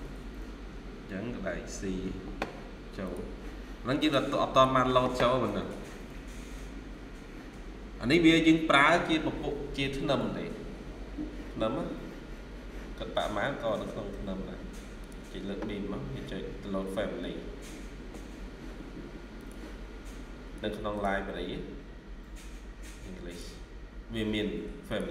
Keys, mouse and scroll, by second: 3.9 right click, 5.3 middle click, 5.8-6.3 scroll down 1, 11.7 scroll up 1.